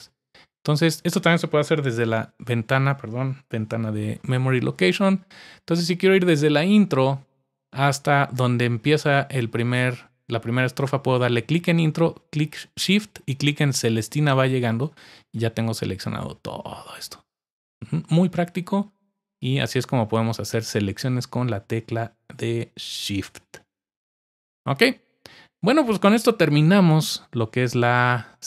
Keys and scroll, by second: 1.9 super+4, 3.4 super+4, 3.6 super+5.